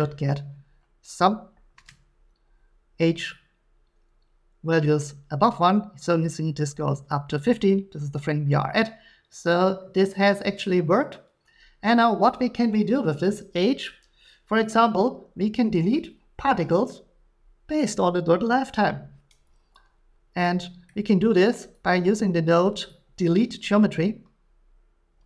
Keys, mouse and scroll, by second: 7.1 click, 12.8 click, 20.9 middle click, 22.9 click.